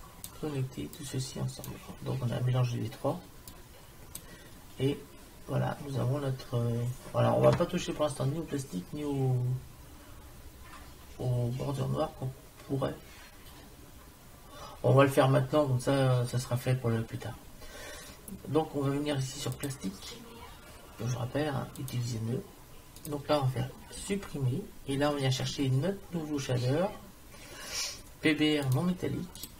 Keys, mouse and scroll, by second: 3.6-5.5 drag, 19.6-21.4 drag, 21.8-24.0 drag, 24.0 Delete, 25.4 shift+a.